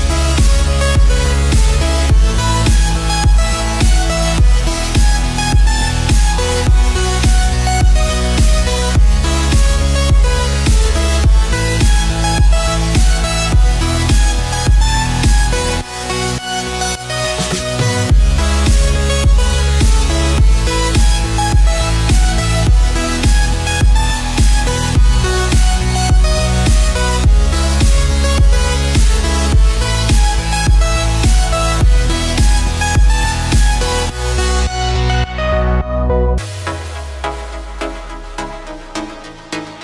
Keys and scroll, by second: 0.2 space, 2.6 ctrl+Return, 2.8 n, 3.9 z, 6.1-10.7 typing, 12.2 x, 12.6 ctrl+d, 12.9 space, 13.4 ctrl+space, 14.0 ctrl+z, 14.5 v, 14.9 ctrl+t, 15.5 ctrl+space, 16.4 shift+Right, 19.7 Return, 20.1 ctrl+t, 20.8 Return, 20.9 ctrl+d, 21.2-22.8 typing, 24.0-26.0 typing, 27.3 space, 27.4 Escape, 27.8 ctrl+space, 28.3-31.6 typing, 31.7 ctrl+0, 32.1 ctrl+space, 32.9 space, 33.2 ctrl+0, 33.5 ctrl+u, 39.5 ctrl+0, 39.7 F7.